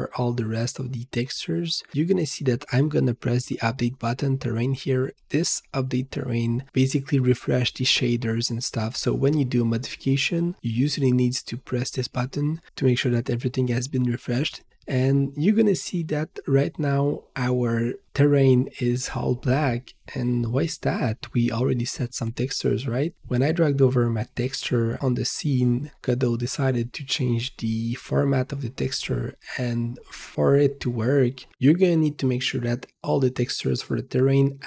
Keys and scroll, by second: 0.0-2.5 typing, 4.1-5.1 typing.